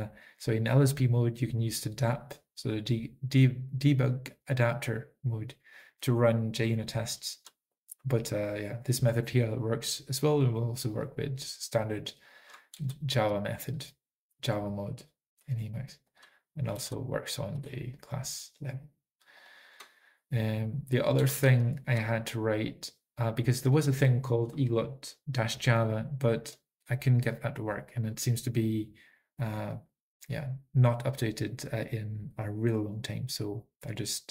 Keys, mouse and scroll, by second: 11.0 click, 16.2 click, 19.5 alt+x, 19.5 Return, 19.5 click, 20.8 click, 21.4 typing, 22.7 click, 22.8 ctrl+p, 22.8 ctrl+n, 22.8 alt+f, 22.8 alt+b, 22.8 alt+x, 22.8 Return, 22.8 typing, 24.9 ctrl+p, 24.9 ctrl+n, 24.9 alt+f, 24.9 alt+b, 24.9 alt+x, 24.9 Return, 24.9 click, 24.9 typing, 26.5 ctrl+p, 26.5 ctrl+n, 26.5 alt+f, 26.5 alt+b, 26.5 alt+x, 26.5 Return, 26.5 typing.